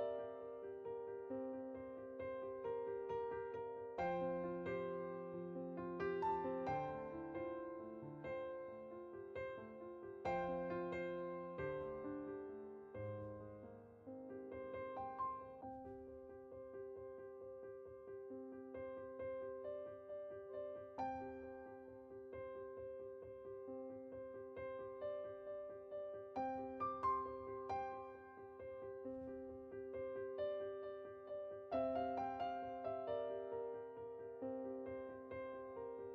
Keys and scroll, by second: 3.1-4.1 typing, 13.4-14.8 typing.